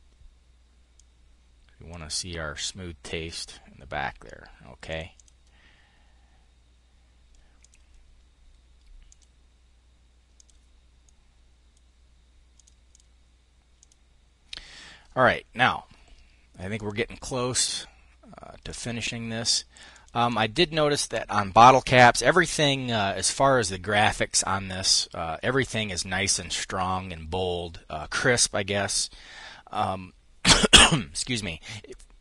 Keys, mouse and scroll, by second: 0.4-1.5 drag, 4.3-5.3 drag, 7.0 click, 8.5 click, 9.7 click, 10.4 click, 12.0-13.1 drag, 13.2 click, 16.2-18.3 drag, 19.3 click.